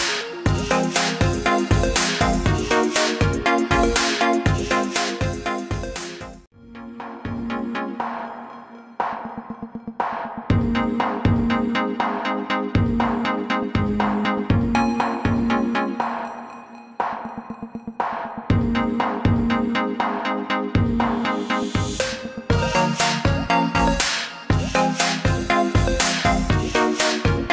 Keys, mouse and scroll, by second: 0.5 ctrl+g, 1.1 click, 8.3 click, 9.9 alt+scroll down 1, 11.3 click, 13.4 shift+click, 14.4 click, 16.5 scroll down 1, 16.7 scroll up 1, 18.5 click, 20.5-21.5 scroll down 1, 21.5 click, 24.4 click.